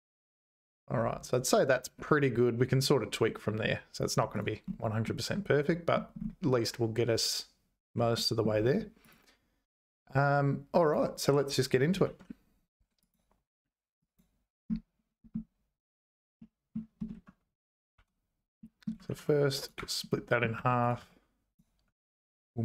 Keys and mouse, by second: 4.3 click, 5.0 middle click, 8.1 middle click, 10.8 click, 12.0 shift+a, 16.4 middle click, 17.4 Tab, 17.9 `, 18.6 middle click, 19.1 ctrl+r, 20.1 middle click, 20.5 3, 20.8 click, 21.0 x, 21.9 Tab.